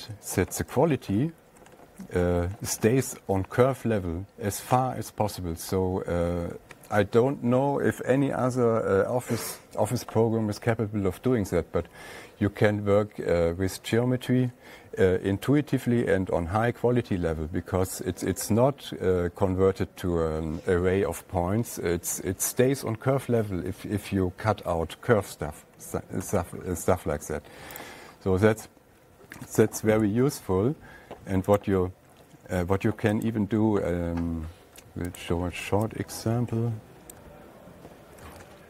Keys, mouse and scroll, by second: 1.2-4.8 ctrl+scroll, 5.4-5.9 ctrl+scroll, 6.0 scroll, 7.3-7.8 scroll, 9.6 scroll, 11.0 scroll down 4, 26.7 *, 28.3 click, 30.4 F8, 30.7 Tab, 32.0 click, 33.7 click, 35.6 click, 37.6 shift+click.